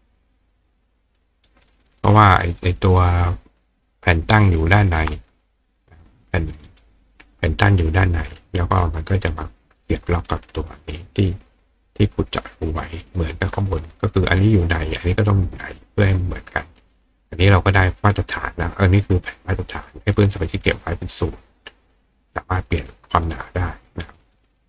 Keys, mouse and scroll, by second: 1.2 ctrl+right click, 2.7-4.6 ctrl+drag, 4.4-6.8 ctrl+right drag, 5.2 click, 6.2 click, 16.8 right click, 21.8 click, 22.5 click.